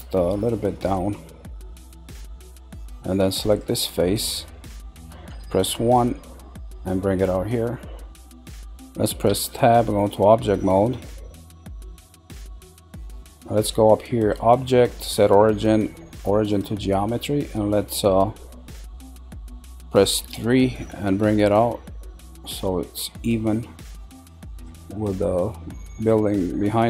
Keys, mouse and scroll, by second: 2.0-3.5 middle drag, 3.5 click, 5.3 KP_1, 6.5 click, 8.2-9.3 middle drag, 9.3 Tab, 9.8-12.1 middle drag, 12.1-12.6 scroll down 1, 12.6-14.2 middle drag, 14.2-17.2 drag, 18.9 middle click, 21.3 click, 24.9-25.6 middle drag, 25.6 scroll.